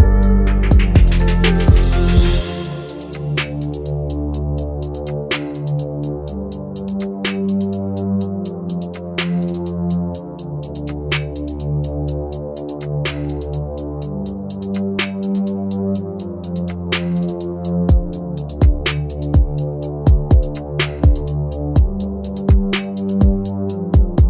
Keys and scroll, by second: 9.0 Escape, 14.1 F3, 16.5 Escape, 20.0 ctrl+z, 23.7 F3, 24.0 Escape.